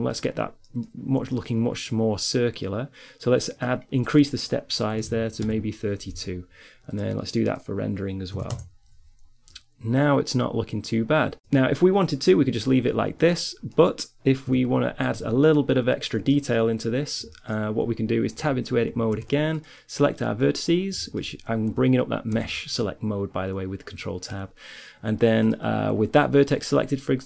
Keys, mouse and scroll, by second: 2.7-3.7 middle drag, 7.1-9.4 middle drag, 13.7 KP_3, 14.5 z, 18.2 Tab, 19.1 ctrl+Tab, 22.6 ctrl+Tab.